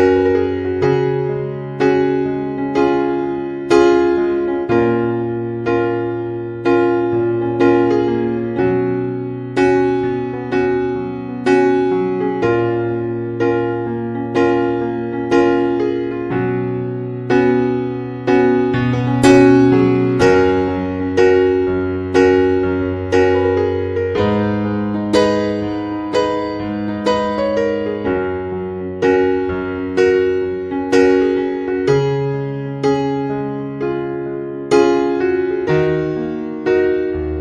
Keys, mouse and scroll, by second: 1.2 r, 8.0 middle click, 10.8 KP_7, 13.4 Tab, 14.7 click, 32.0 g, 36.6-37.4 scroll up 3.